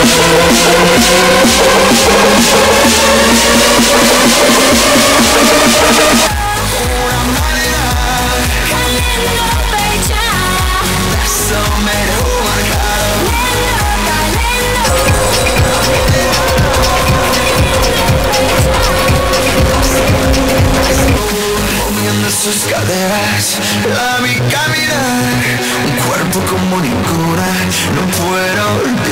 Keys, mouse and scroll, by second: 7.1 Page_Down, 21.5 Page_Down.